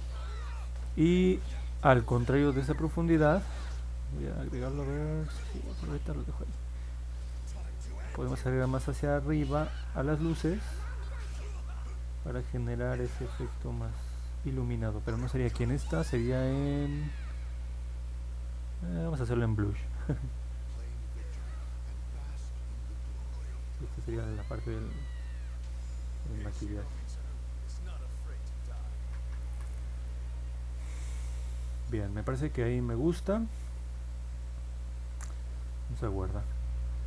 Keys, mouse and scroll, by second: 14.9 ctrl+z, 24.6 click, 25.3 click, 25.6 click, 28.6 click.